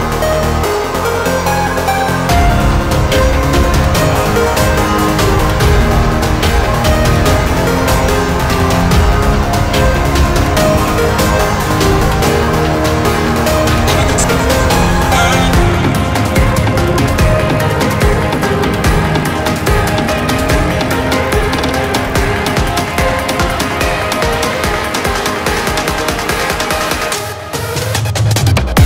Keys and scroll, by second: 20.3 Delete.